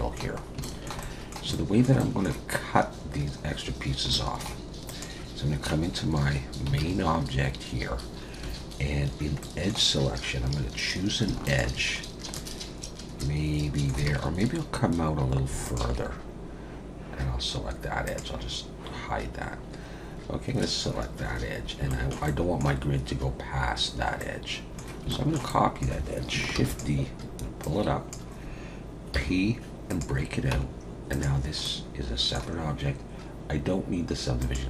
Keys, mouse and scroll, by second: 0.4 scroll up 2, 0.6 shift+middle click, 1.0 middle click, 1.5 shift+middle click, 2.0 middle click, 4.4 shift+middle click, 4.9 click, 5.8 Tab, 6.8 alt+a, 8.4 2, 9.4 middle click, 11.5 alt+shift+click, 12.0 scroll down 1, 12.4 middle click, 14.1 alt+a, 15.6 alt+shift+click, 18.1 click, 19.4-20.7 scroll up 3, 21.3-21.6 scroll down 4, 21.9 shift+middle click, 22.2 middle click, 24.2 middle click, 25.1 shift+middle click, 25.5 middle click, 26.5 shift+d, 27.6 click, 29.1 p, 30.5 Tab, 31.1 click, 31.6 middle click, 34.4 click.